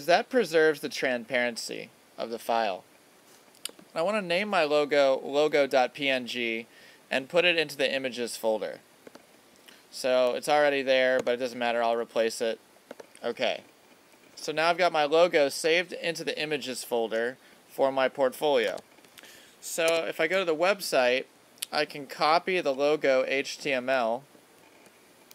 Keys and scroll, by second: 20.3 super+Tab.